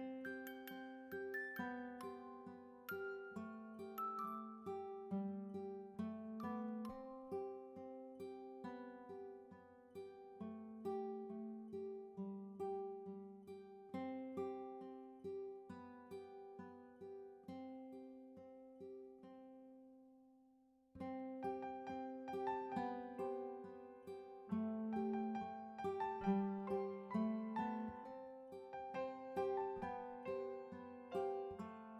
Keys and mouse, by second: 2.1 click, 3.4 click, 4.7 click, 4.9 click, 8.5 click, 9.7 click, 13.2 click, 14.0 click, 19.1 click, 19.9 click, 22.1 click, 23.1 click, 24.8 click, 28.3 click, 29.4 click.